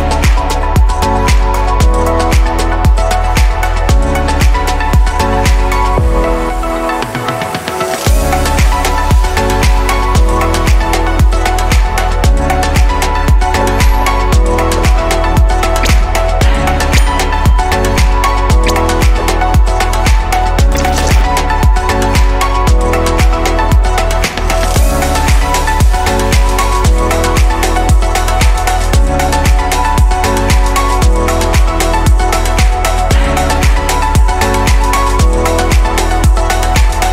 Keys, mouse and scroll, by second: 1.5 click, 3.2 click, 3.8-4.3 scroll down 3, 4.3 click, 5.1-7.9 middle drag, 7.9 click, 10.6-12.2 middle drag, 12.2 click, 13.2 click, 18.5-19.0 scroll up 2, 19.0-19.8 shift+middle drag, 19.8-20.6 scroll up 1, 20.6 click, 24.1-26.1 drag, 27.0 click, 28.6-31.7 middle drag.